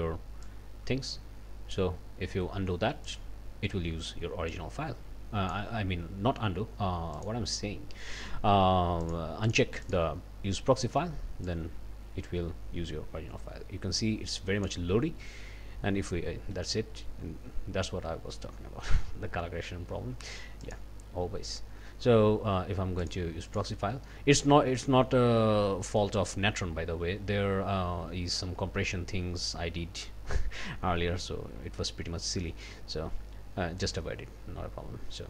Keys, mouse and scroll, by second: 0.4-1.9 drag, 3.1 click, 4.5-5.7 drag, 7.1 click, 9.0 click, 9.4 click, 9.8 click, 11.5-14.8 drag, 20.6 click, 23.0 click, 23.5 click, 25.6 scroll down 1, 26.0 click.